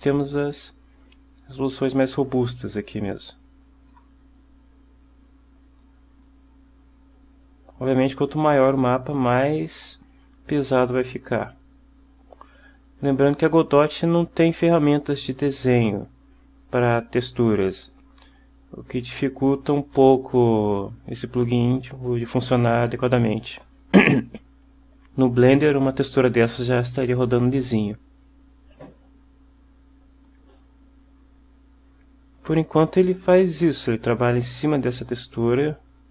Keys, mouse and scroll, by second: 0.0 click, 1.5-2.5 drag, 2.7-4.2 drag, 5.1 click, 6.3-8.2 drag, 8.7-11.7 drag, 18.4-19.9 drag, 20.0-21.1 drag, 21.6-22.2 drag, 34.9 click.